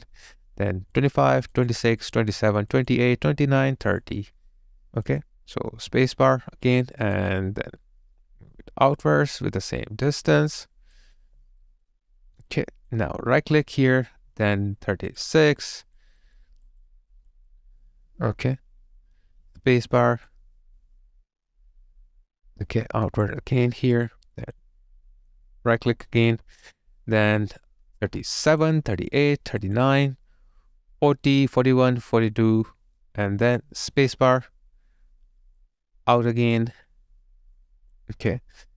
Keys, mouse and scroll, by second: 3.3 double click, 11.6 alt+right click, 12.1 alt+middle click, 12.5 alt+click, 13.4 right click, 19.4 space, 23.7 space, 23.9 alt+right click, 24.1 alt+click, 25.0 alt+middle click, 25.9 right click, 29.0 double click, 34.0 space.